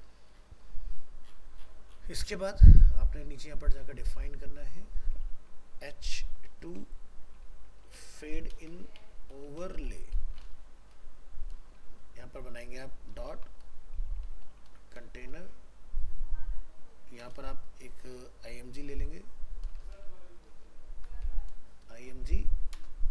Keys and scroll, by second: 10.9 ctrl+s.